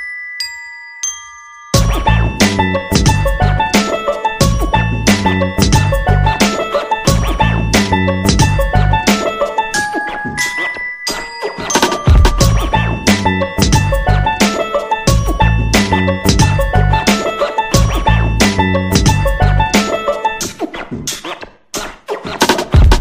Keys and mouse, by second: 0.6 alt+z, 0.9-1.5 right drag, 1.0 g, 1.9 right click, 2.0 g, 2.9 shift+middle click, 3.6 g, 4.8 right click, 5.1 g, 6.8 right click, 7.1 g, 7.7 KP_1, 8.5 alt+z, 9.0 g, 11.0 middle click, 12.1 alt+right click, 12.5 KP_1, 13.1 g, 14.7 KP_3, 15.4 shift+middle click, 16.3 alt+z, 16.3 KP_1, 16.7 shift+middle click, 17.4 alt+z, 17.9 right click, 18.1 g, 19.5 g, 20.9 Tab, 21.3-22.0 middle drag, 22.1 KP_3, 22.5 shift+middle click.